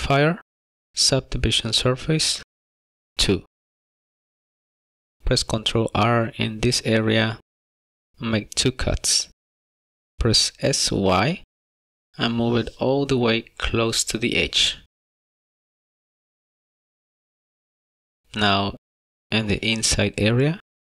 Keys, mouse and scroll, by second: 5.0 click, 5.2 shift+middle click, 5.9 ctrl+r, 12.3 s, 17.1 shift+middle click, 17.7 middle click, 17.8 middle click, 18.9 ctrl+r.